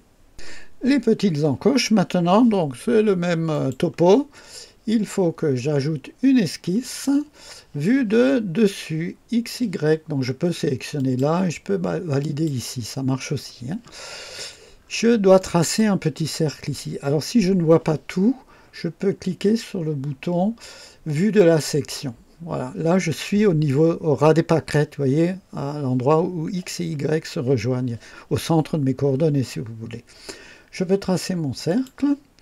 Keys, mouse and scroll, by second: 3.4 click, 6.8 click, 10.9 click, 12.1 click, 14.7 scroll up 1, 15.3 right click, 21.3 click, 31.6 click.